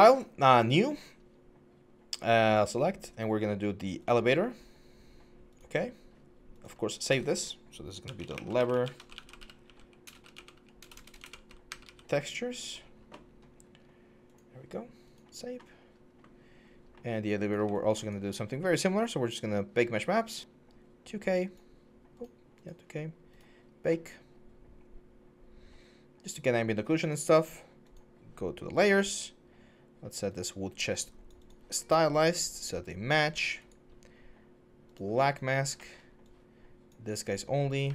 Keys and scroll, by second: 8.0-11.6 typing, 35.3 4, 37.3 1.